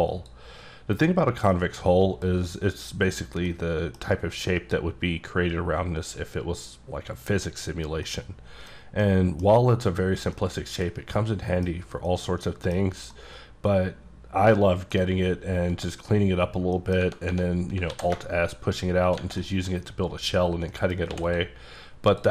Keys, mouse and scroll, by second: 0.1 click, 1.5 middle click, 3.4 middle click, 8.3 middle click, 9.1 middle click, 10.4 middle click, 11.1 middle click, 11.6 scroll down 1, 12.0 middle click, 13.1 middle click, 15.1-15.7 scroll up 1, 16.7 middle click, 17.9 alt+s, 19.0 shift+click, 19.4 middle click, 20.7 middle click, 21.1 x, 21.2 click, 22.1 click.